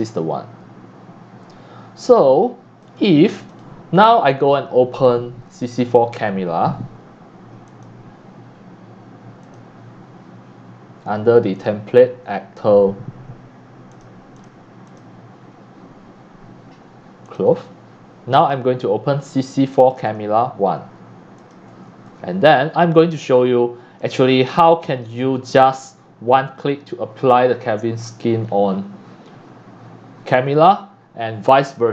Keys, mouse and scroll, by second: 0.2-1.3 drag, 2.3 scroll up 1, 2.8 click, 3.5 click, 7.7 click, 9.4 click, 11.6 click, 13.5 click, 14.3 click, 14.8 click, 17.2 click, 18.4 click, 19.9 click, 20.1 click, 21.4 click, 24.0 click, 25.6 click.